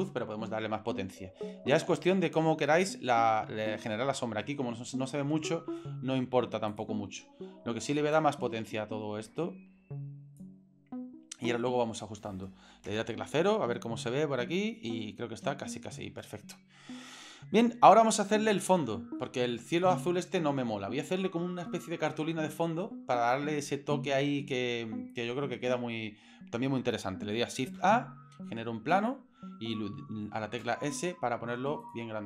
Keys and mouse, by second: 1.7 s, 6.3 s, 8.2-10.4 drag, 12.9 KP_0, 18.7 shift+middle click, 19.3 middle click, 20.8-21.2 shift+middle drag, 27.8 shift+a, 30.6 s.